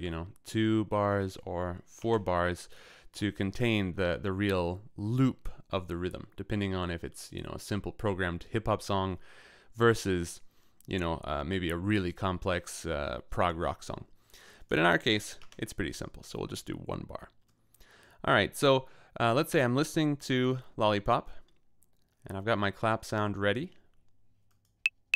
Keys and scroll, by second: 0.0 Return, 1.9 4, 2.0 Return, 15.3 l, 15.4 Return, 22.8 d, 24.8-25.1 typing.